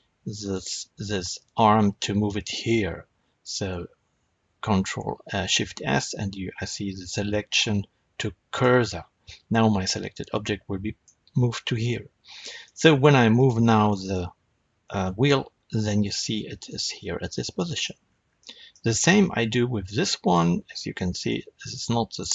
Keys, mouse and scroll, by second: 0.3 click, 3.6 shift+s, 9.2-13.2 middle drag, 11.5-12.2 scroll down 2, 12.2-12.5 scroll down 1, 12.8-13.2 scroll down 2, 13.2 click, 13.8-17.7 middle drag, 14.8 r, 17.7 right click, 17.9 scroll down 2, 18.1-20.1 shift+middle drag, 20.1 click, 20.9 r, 22.2 right click.